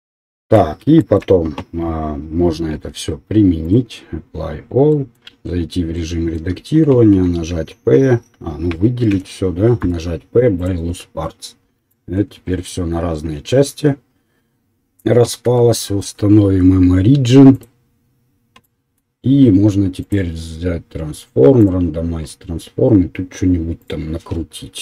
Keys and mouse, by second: 0.1 middle click, 2.7 ctrl+a, 5.5 Tab, 7.1 p, 8.7 a, 9.1 a, 9.8 p, 12.1 Tab, 15.5 w.